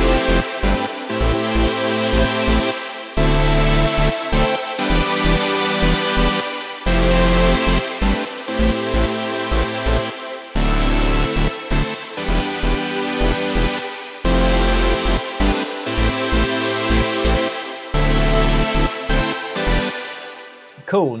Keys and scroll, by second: 19.8 space, 20.7 super+space.